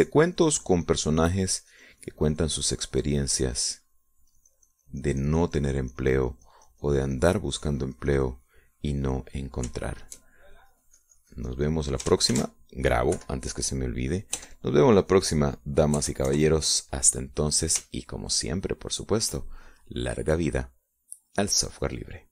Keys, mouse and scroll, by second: 5.1-10.4 drag, 10.9 middle click, 11.7 shift+middle click, 12.5-13.9 shift+drag, 14.3 ctrl+shift+s, 15.1 KP_Subtract, 16.3 KP_Add, 17.9 KP_Add, 18.2 KP_Enter, 19.9 shift+click, 20.9 shift+middle click.